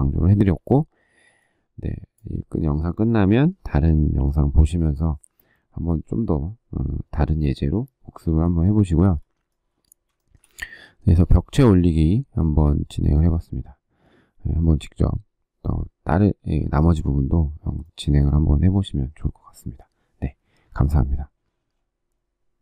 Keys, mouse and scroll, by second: 3.9 Delete, 8.4 shift+middle click, 9.9 shift+middle click.